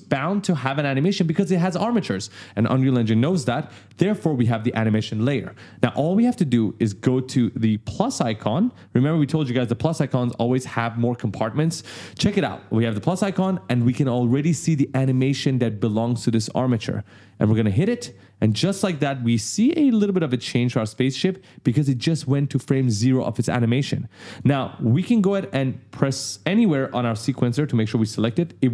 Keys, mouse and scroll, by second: 12.8 click, 17.6 click, 20.4 right click, 20.5 a, 21.8 d, 23.2 d, 26.6 click.